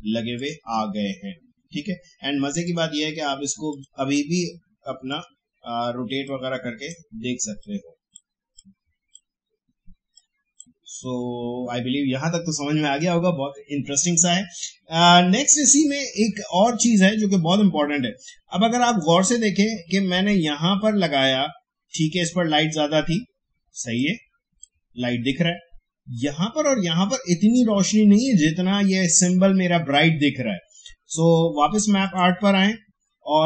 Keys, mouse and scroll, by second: 1.2-1.7 alt+scroll up 1, 1.8 alt+scroll down 1, 2.6-13.1 drag, 23.9-27.2 drag, 32.0 click.